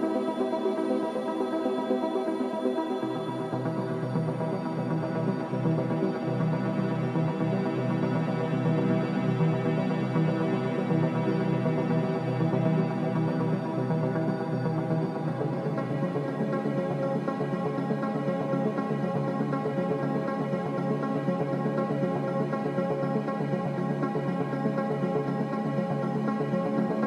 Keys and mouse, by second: 0.0 ctrl+s, 1.6 Tab, 2.1 Tab, 2.6 z, 10.4 click, 11.2 click, 13.8-14.6 drag, 14.8-21.2 drag, 23.9 shift+a.